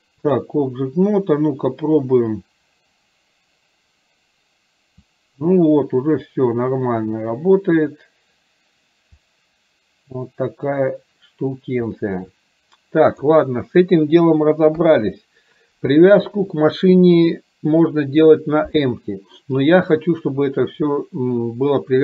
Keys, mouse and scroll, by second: 0.0 click, 1.5 click, 2.4-13.4 drag.